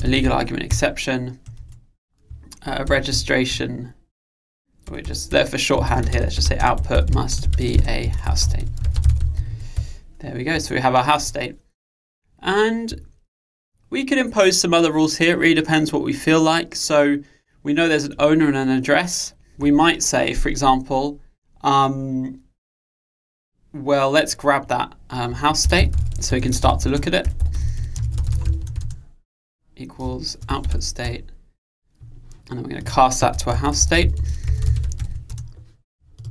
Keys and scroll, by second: 0.8 Return, 31.1 Return.